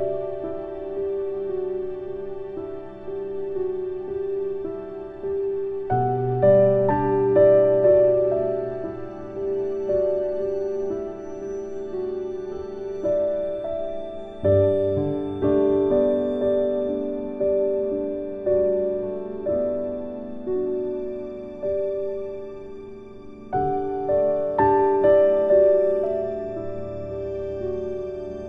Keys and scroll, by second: 15.9 ctrl+z.